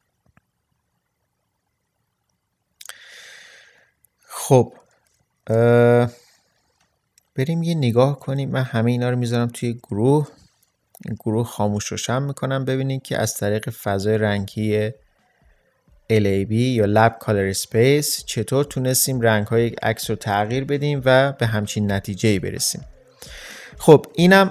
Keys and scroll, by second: 5.5 ctrl+space, 9.7 ctrl+g.